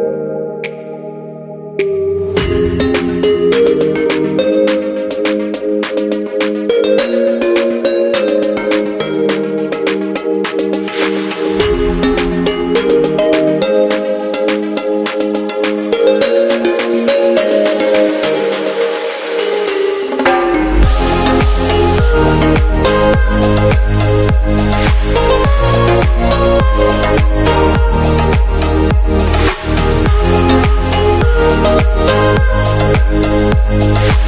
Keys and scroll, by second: 18.1 alt+shift+super+e.